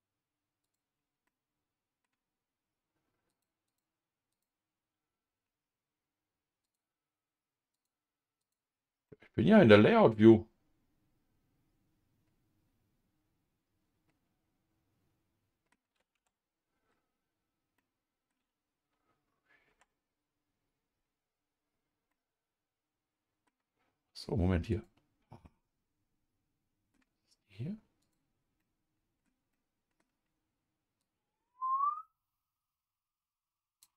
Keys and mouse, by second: 0.6 click, 1.3 middle click, 3.3 click, 3.7 click, 6.6-7.7 drag, 8.4 click, 9.1-15.7 middle drag, 16.1 Tab, 17.8 middle click, 19.7 Tab, 22.1-23.5 middle drag, 24.7 click, 25.4-26.9 middle drag, 28.0 click, 28.6 middle click, 29.5 middle click, 31.0-33.9 drag.